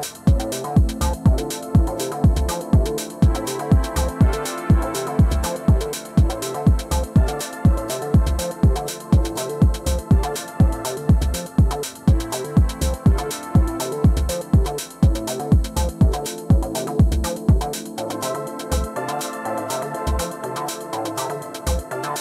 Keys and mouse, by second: 3.7-4.0 alt+drag, 4.5-5.7 drag, 6.4 alt+click, 7.7 alt+click, 8.3 alt+click, 9.5-10.6 alt+drag, 10.8 alt+click, 19.0 click, 20.5 click.